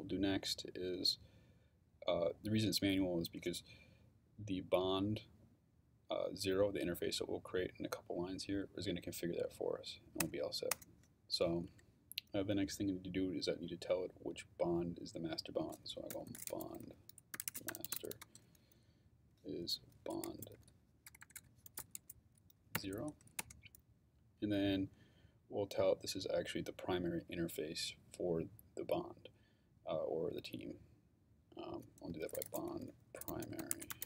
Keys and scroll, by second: 10.2 Return, 11.7 Up, 15.9-18.4 typing, 19.5-22.7 typing, 23.4 Return, 31.8-34.0 typing.